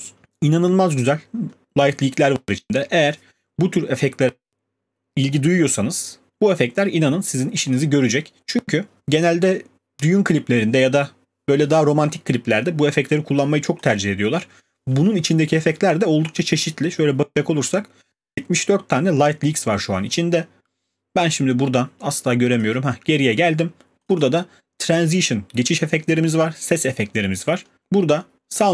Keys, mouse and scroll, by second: 1.7-5.2 scroll, 6.1-7.7 scroll, 7.7 click, 12.5 click, 13.8 click, 14.0 click, 15.5-18.5 scroll, 22.6 click, 24.2 click.